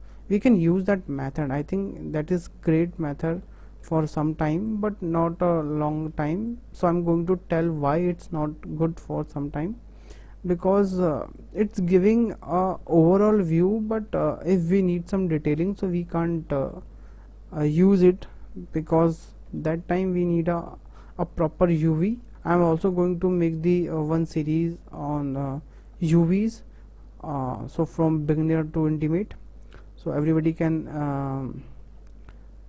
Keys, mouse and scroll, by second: 1.6 click, 2.2 click, 4.3 click, 4.7 click, 6.9 click, 7.4 click, 10.9 click, 11.4 click, 14.4 click, 14.9 click, 20.9 click, 21.3 click, 22.8 click, 23.4 click, 26.0 click, 26.5 click, 29.8 click, 30.3 click.